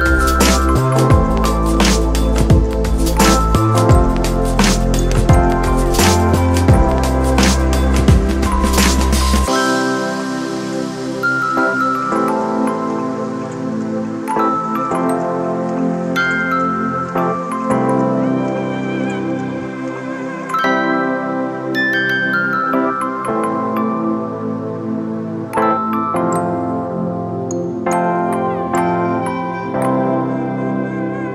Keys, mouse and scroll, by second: 5.9 ], 17.5 [, 21.8 ], 30.3 ].